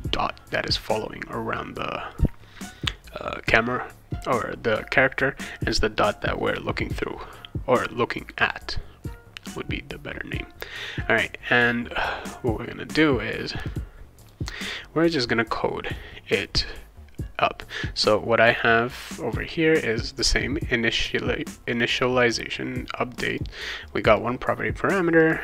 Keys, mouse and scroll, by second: 9.4 click, 14.2 click, 15.8 click, 21.7 click, 22.2 click, 23.1 click, 23.8 click, 24.1 click, 25.2 click.